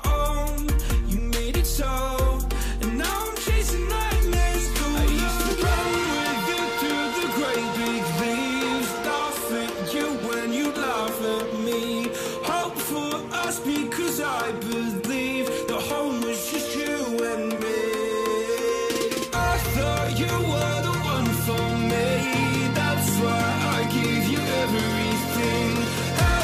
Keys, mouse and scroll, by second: 3.5 right click, 7.9 right click, 12.0 right click, 15.3 double click, 18.4 right click, 22.4 typing, 23.6 typing.